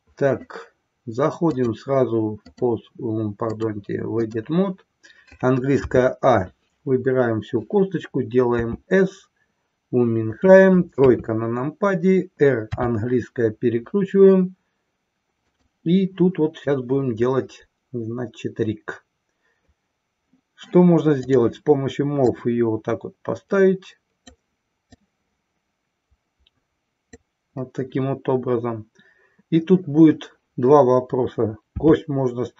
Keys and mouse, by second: 1.4-2.8 drag, 3.4-4.4 drag, 8.6 s, 11.0 KP_3, 12.6 r, 21.2 click, 22.3-24.4 drag, 24.9-27.2 drag.